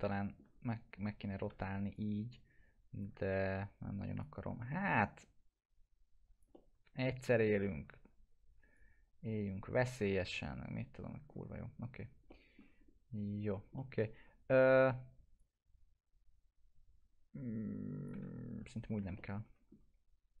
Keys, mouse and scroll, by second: 1.5 e, 1.9-3.2 drag, 3.4 ctrl+z, 4.2-7.8 drag, 6.5-7.9 alt+middle drag, 7.9 w, 8.7-10.0 drag, 10.1-11.3 alt+middle click, 11.3 scroll down 1, 12.3 alt+middle click, 12.8 scroll up 1, 13.5 scroll down 1, 13.7-14.7 alt+middle click, 14.8 e, 15.4-18.2 drag, 18.4 ctrl+z, 18.8 scroll down 1, 19.2-19.8 alt+middle click.